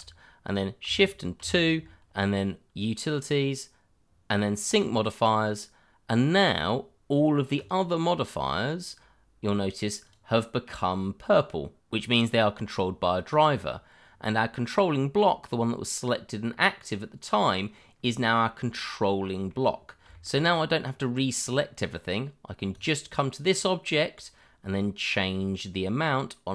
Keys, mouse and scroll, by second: 1.4 shift+2, 5.2 click, 6.5-7.5 scroll down 1, 7.5 click, 8.9 click, 10.0 click, 13.7 click, 14.1-14.9 scroll up 1, 19.2 middle click, 20.1 shift+middle click, 20.4 click, 20.9 double click, 21.0 click, 21.9 double click, 22.7 click, 23.5-24.8 scroll up 1, 24.8 click.